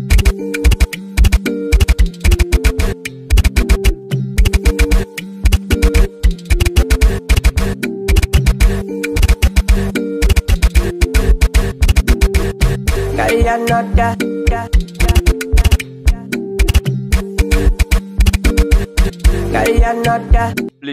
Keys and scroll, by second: 0.0-20.3 typing.